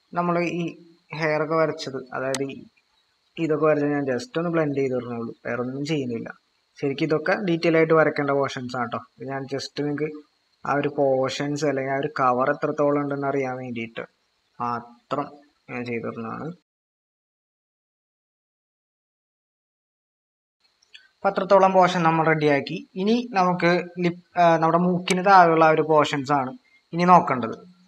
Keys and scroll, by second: 20.0 ctrl+-, 20.1 ctrl+=.